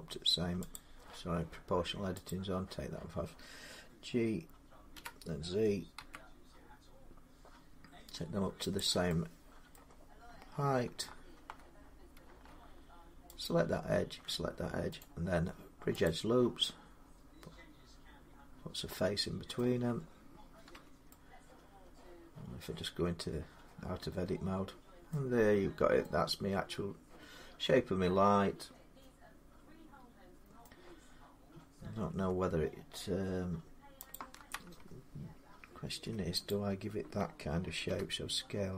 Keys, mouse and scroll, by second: 0.3 g, 0.5 click, 2.1 click, 4.7 g, 5.8 z, 8.6 click, 9.5 middle click, 10.1 scroll up 2, 11.8-12.2 scroll down 3, 13.3 click, 14.8 right click, 15.9 click, 16.8 middle click, 19.4 middle click, 19.4 scroll, 20.5 Tab, 22.0-24.4 middle drag, 25.1-25.7 scroll, 27.0-29.9 middle drag, 27.0 scroll down 9, 30.4 middle click, 30.9-32.0 scroll up 3, 32.0 Tab, 33.9 click, 35.6 ctrl+r, 36.3 click, 37.7 s.